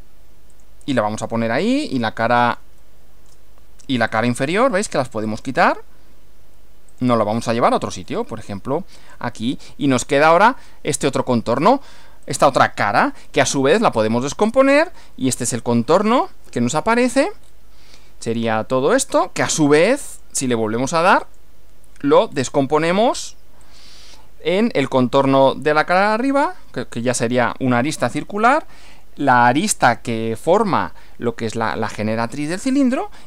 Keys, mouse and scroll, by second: 0.5 click, 1.5-3.5 middle drag, 4.1 click, 5.3 click, 6.9 click, 7.4 middle click, 7.6 scroll down 1, 9.0 click, 10.1-11.0 middle drag, 11.1-11.8 shift+middle drag, 12.2 click, 14.2 click, 17.4 scroll down 1, 20.1 click, 21.2 click, 22.3-22.7 scroll down 1, 23.6 click.